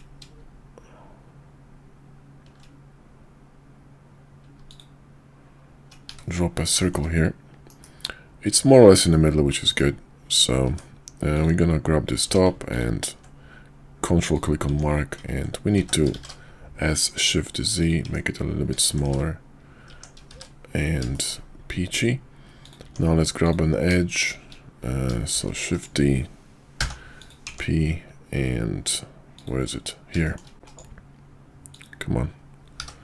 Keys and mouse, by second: 6.8 middle click, 7.7 KP_5, 9.1-9.5 middle drag, 10.6 Tab, 11.2 click, 12.2 q, 14.7 Tab, 15.8 s, 18.0 Tab, 18.8 shift+2, 19.1 shift+2, 19.9 Tab, 20.3 shift+2, 22.5 click, 22.8 Tab, 23.3 click, 25.3 shift+d, 26.7 p, 27.5 Tab, 30.1 shift+middle drag, 30.5 g, 32.7 g.